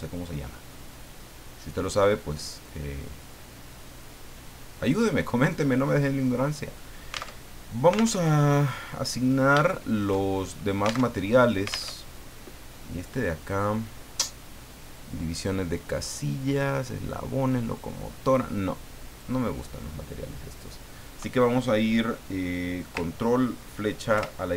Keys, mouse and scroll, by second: 2.6-3.7 middle drag, 3.9 middle click, 4.8-5.5 scroll down 4, 7.3 alt+Tab, 8.1 alt+Tab, 9.0 middle click, 9.3-9.6 scroll up 1, 9.6 shift+middle click, 10.3 shift+right click, 11.0 alt+shift+Tab, 11.8 alt+Tab, 13.4 click, 18.2 click, 19.1 click, 24.1 ctrl+Left.